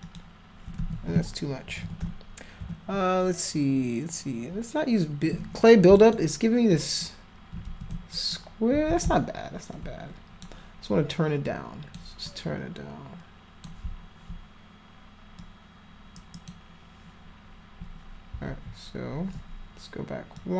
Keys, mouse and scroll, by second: 0.1 alt+click, 0.8 ctrl+z, 1.7 [, 1.8 [, 2.0 [, 2.6 [, 6.1 alt+click, 6.8 alt+click, 7.7 ctrl+z, 8.2 alt+click, 8.9 ctrl+z, 9.8 alt+click, 11.5 click, 12.3-13.7 drag, 15.4-16.5 drag, 16.2 right click, 20.4 click.